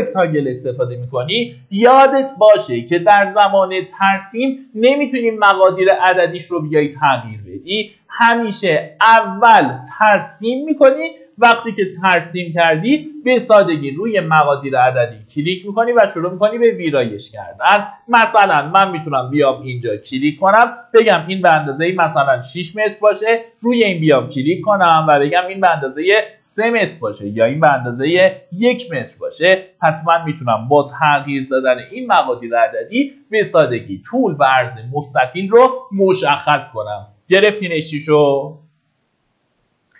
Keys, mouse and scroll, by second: 20.7 KP_6, 22.9 click, 24.7 KP_3, 26.6 click, 27.7 KP_1, 29.7 click, 31.1 KP_3, 39.7 middle click.